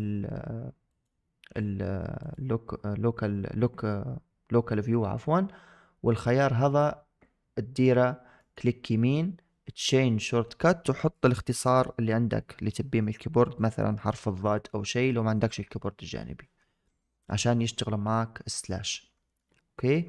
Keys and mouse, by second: 2.1-16.1 drag, 17.9 KP_Divide, 19.3-19.7 middle drag, 19.9 shift+middle click.